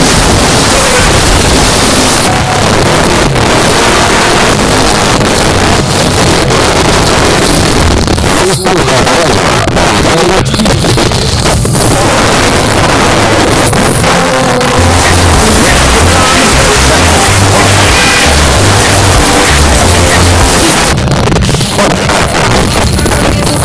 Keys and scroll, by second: 2.1 Page_Down, 20.8 Page_Down.